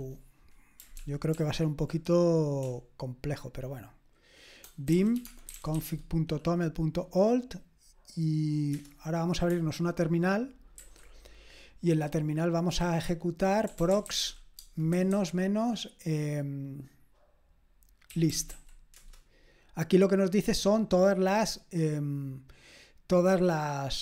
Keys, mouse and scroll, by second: 1.0 ctrl+p, 1.3 ctrl+p, 2.6-5.8 typing, 10.8 ctrl+t, 13.4-15.1 typing, 17.9-19.0 typing, 23.5-24.0 scroll up 1.